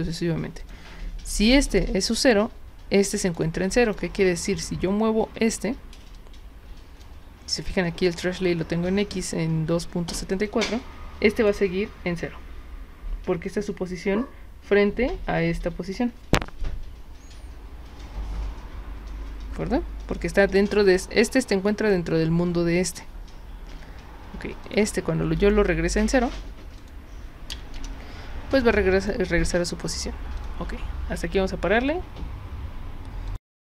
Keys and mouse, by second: 0.6 click, 1.4 click, 3.3 click, 3.9 drag, 4.5 click, 5.5 w, 6.2-7.0 drag, 10.5 click, 11.4 click, 24.7 click, 25.4 click, 26.8 click.